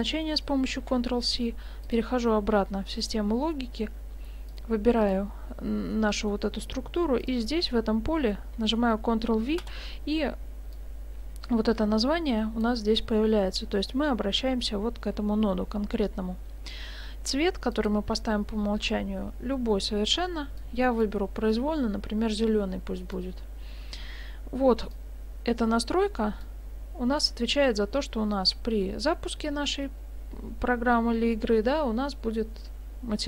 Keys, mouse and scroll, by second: 0.8 ctrl+c, 1.9 click, 4.5 click, 5.9 middle click, 7.2 click, 10.7 click, 15.7 middle click, 17.7 click, 24.1-24.4 scroll down 1, 24.9 click, 24.9 scroll down 1.